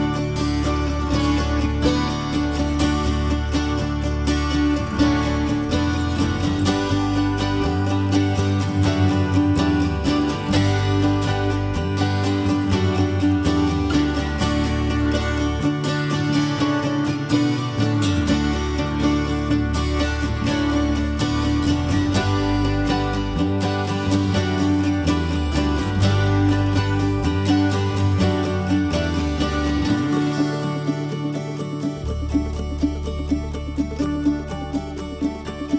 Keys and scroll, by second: 6.1 4, 6.2 Return, 7.7 Escape, 8.1 Escape.